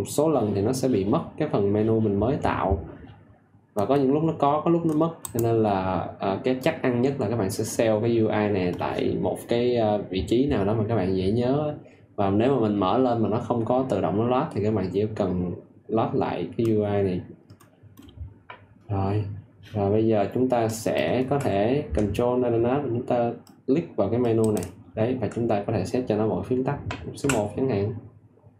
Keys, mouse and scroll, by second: 24.3 ctrl+alt+click, 27.1 1.